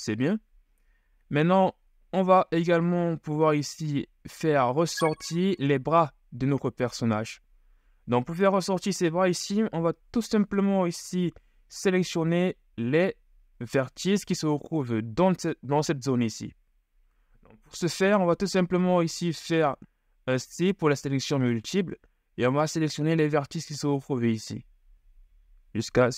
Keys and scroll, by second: 20.5 [.